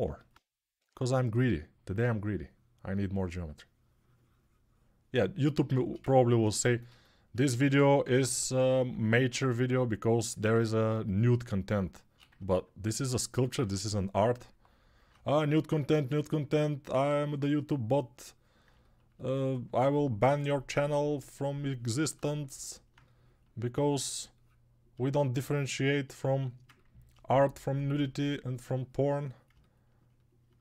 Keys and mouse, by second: 0.6 6, 7.8-8.6 typing.